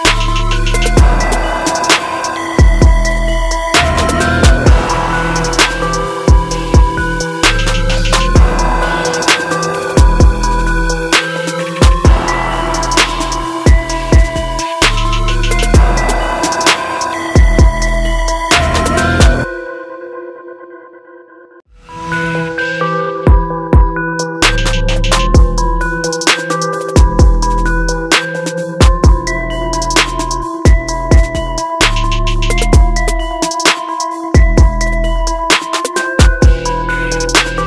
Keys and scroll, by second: 3.3 ctrl+t, 15.3 ctrl+alt+z, 23.5 ctrl+alt+z.